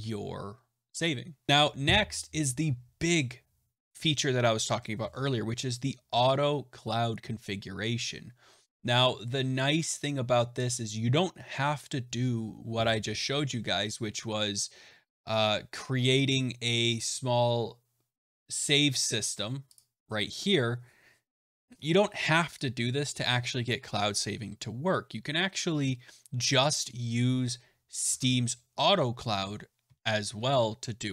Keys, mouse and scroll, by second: 1.5 scroll, 19.7 click, 23.6 click, 28.0 alt+Tab.